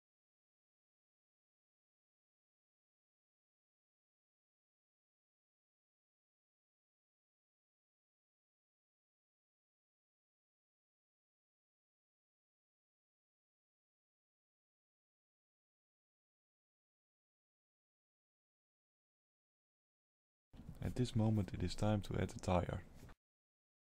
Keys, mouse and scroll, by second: 0.4 click, 1.4 click, 2.5 click, 4.6 click, 8.3 click, 9.8 ctrl+c, 10.4 ctrl+v, 11.0-12.6 ctrl+v, 15.2 middle click, 16.2 shift+middle click, 16.9 middle click, 17.8 shift+a.